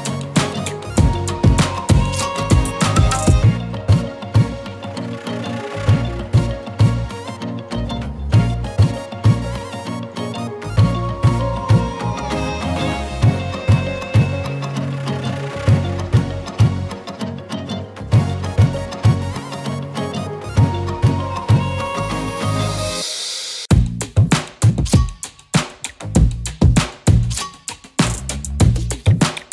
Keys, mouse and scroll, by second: 3.7 Up, 7.0 click, 7.8 scroll up 1, 8.1 z, 8.3 click, 8.6-9.2 z, 9.2 space, 9.3 click, 11.3-12.1 typing, 11.4-12.1 click, 12.1 click, 12.8-17.2 drag, 17.7 z, 17.7 click, 18.0-18.4 z, 19.0 click, 19.9 z, 20.0 click, 20.2 space, 20.3 click.